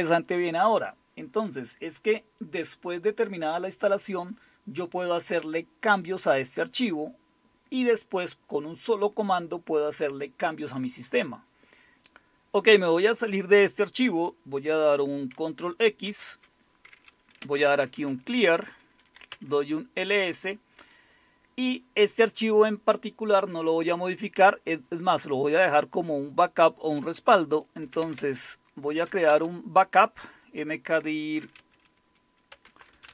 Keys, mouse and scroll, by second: 1.4-2.2 scroll down 1, 5.9 click, 16.1 ctrl+x, 17.2-19.7 typing, 27.6-29.6 typing, 31.2-33.1 typing.